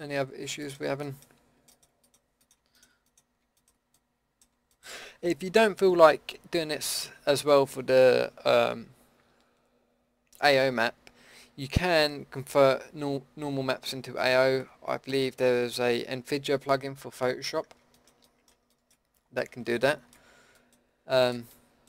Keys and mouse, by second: 1.2 click, 1.2 middle click, 1.8 middle click, 4.3 middle click, 15.9 middle click, 19.1-21.8 middle drag.